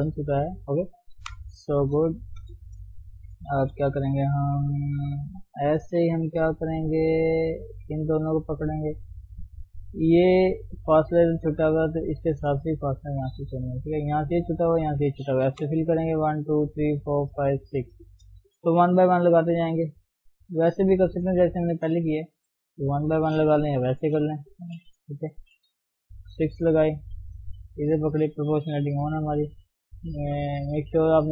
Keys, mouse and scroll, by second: 0.8 ctrl+shift+s, 1.2 KP_1, 1.5-2.3 scroll up 2, 1.7 Tab, 2.3 shift+z, 2.5 scroll down 2, 2.7 shift+middle click, 3.5-4.2 scroll up 3, 3.6 shift+middle click, 4.4-5.5 middle drag, 5.5-5.8 scroll down 1, 5.8 KP_3, 6.1-6.7 scroll up 5, 6.7-8.0 shift+middle drag, 8.0 click, 11.7 shift+click, 12.5 shift+click, 12.8-15.6 middle drag, 15.6 f, 19.0 ctrl+r, 20.0 KP_1, 23.7 ctrl+z, 25.3 ctrl+r, 27.2 click, 28.9 g.